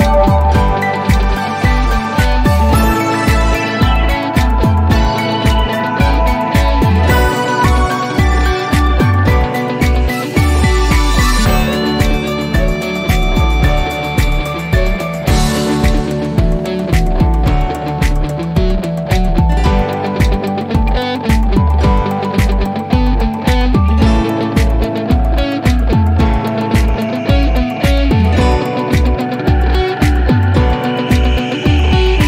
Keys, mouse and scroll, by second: 3.6 click, 5.4 click, 8.2 click, 12.7 click, 14.7 click, 16.4 click, 18.5 click, 21.5 click, 29.7 click.